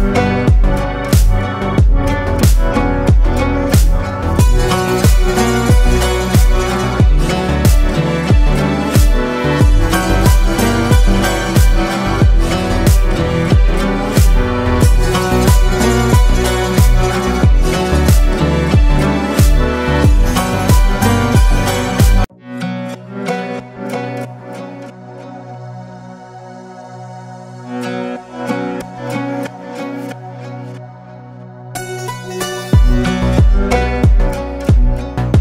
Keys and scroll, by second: 4.3 ctrl+space, 16.0 ctrl+space, 16.7 ctrl+space, 17.3 ctrl+space, 30.6 ctrl+space, 31.5 ctrl+space, 34.7 ctrl+g.